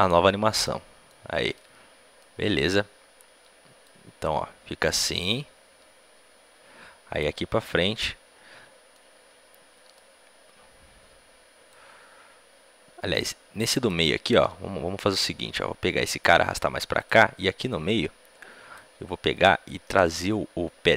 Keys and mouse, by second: 0.5 i, 1.8-6.1 drag, 7.5-11.6 middle drag, 11.6-13.4 drag, 15.9 g, 17.6-20.9 drag, 19.2-20.9 right drag.